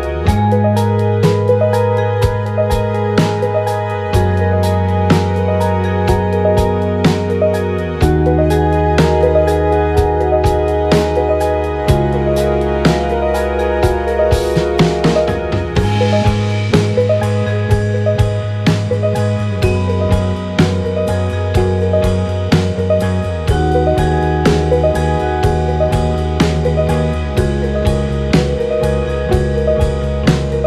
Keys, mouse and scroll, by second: 2.5 a, 2.7 a, 5.4 c, 8.4-11.0 drag, 11.0 b, 17.2 x, 18.5 b, 18.9 x, 20.2-22.6 typing, 21.2 click, 24.2 b, 24.6 x, 25.3 b, 25.8 x, 27.7 x, 29.0-29.9 drag.